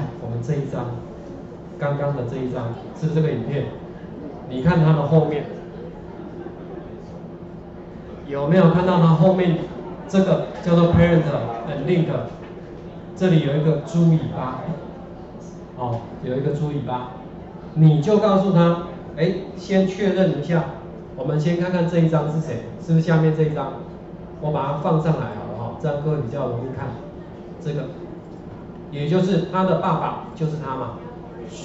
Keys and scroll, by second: 6.9 ctrl+4, 20.3 ctrl+4.